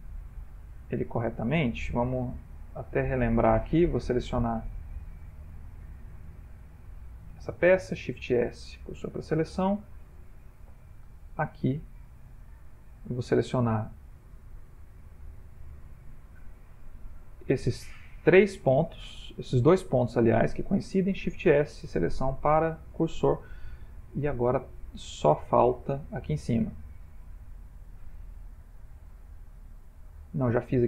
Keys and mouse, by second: 0.1 middle click, 0.4 middle click, 1.4 middle click, 1.7 Tab, 2.3 middle click, 2.4 middle click, 3.9 click, 4.7 click, 5.7 click, 6.7 click, 8.2 shift+s, 9.9 middle click, 10.9 middle click, 11.0 click, 12.2 Tab, 12.8 middle click, 12.9 middle click, 14.1 click, 15.5 g, 17.9 ctrl+middle click, 18.0 ctrl+middle click, 18.3 ctrl+middle click, 19.8 ctrl+middle click, 19.9 ctrl+middle click, 21.2 shift+s, 23.1-23.5 ctrl+middle click, 23.2 ctrl+middle click, 23.8-25.4 shift+middle click, 24.1 shift+middle click, 24.4-25.0 ctrl+middle click, 24.5 ctrl+middle click, 25.2 ctrl+middle click, 25.5 shift+middle click, 25.6 shift+middle click, 26.6 ctrl+middle click, 26.7 ctrl+middle click, 26.8 ctrl+middle click, 27.1 middle click, 30.6 middle click.